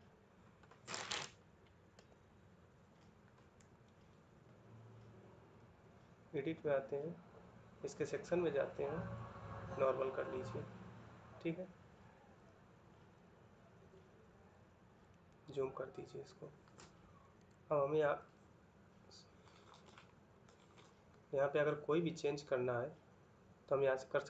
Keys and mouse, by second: 1.7 Escape, 17.1 Escape.